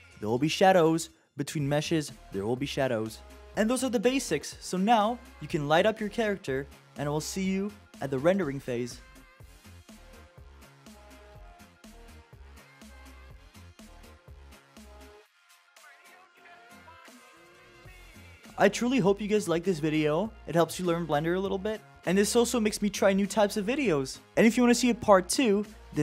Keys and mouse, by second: 3.5 click, 4.7 click, 5.0 click, 5.7 click, 8.2 shift+d, 9.4 click, 10.1 click, 11.6 click, 12.7 click, 14.1 shift+d, 14.5 middle click, 14.8 click, 15.5 click, 16.1 click, 16.7 click, 17.8 click, 19.3 middle click, 19.7 shift+d, 20.1 click, 20.9 click, 22.4 click, 25.1-25.9 drag.